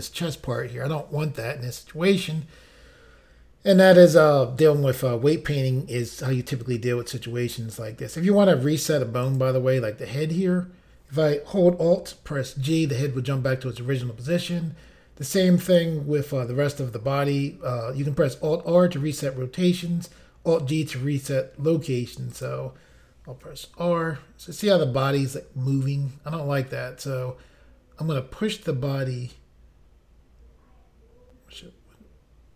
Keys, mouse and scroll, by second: 9.2 click, 9.4 click, 12.5 alt+g, 22.3 click, 22.5 click, 23.4 r.